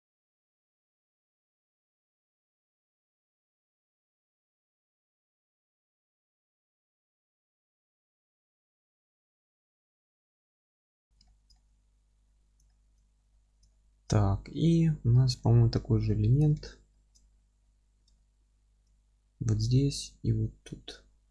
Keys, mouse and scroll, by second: 0.4 click, 0.8 click, 1.0 g, 1.6 click, 1.8 middle click, 2.0 g, 2.6 scroll down 1, 2.9-6.1 alt+middle drag, 3.1 scroll up 2, 3.3 scroll down 2, 3.5 alt+z, 3.8-4.4 scroll down 4, 4.4 Tab, 4.7 scroll up 2, 5.4 F3, 5.8 scroll up 1, 6.1 click, 6.2 z, 6.4-7.9 alt+middle drag, 7.3 scroll up 1, 7.4 Tab, 7.8 2, 7.9 click, 8.1 ctrl+b, 8.5 click, 8.6-9.7 alt+middle drag, 9.2 scroll down 1, 9.7 click, 10.0-10.5 middle drag, 10.5 click, 10.8-11.8 middle drag, 11.8 Tab, 12.3-12.7 scroll down 1, 12.7 alt+middle click, 13.4-13.7 scroll down 1, 13.7 alt+middle click, 14.0-14.4 scroll down 1, 14.4 middle click, 15.1 scroll down 1, 15.4 alt+middle click, 16.4 click, 16.6 alt+q, 16.9 alt+middle click, 17.3-17.6 scroll up 1, 18.2 alt+middle click.